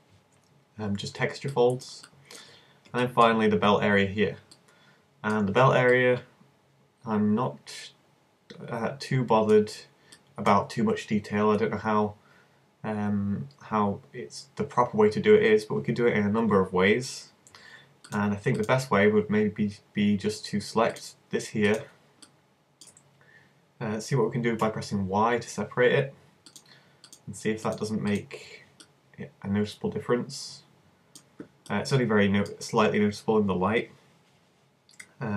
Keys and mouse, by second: 1.0-3.0 middle drag, 10.2-13.8 middle drag, 18.0-21.3 alt+right drag, 21.5-24.6 middle drag, 24.6 y, 26.5-27.6 drag, 28.3 click, 28.9 middle click, 30.4-31.8 middle drag, 32.0-34.0 middle drag.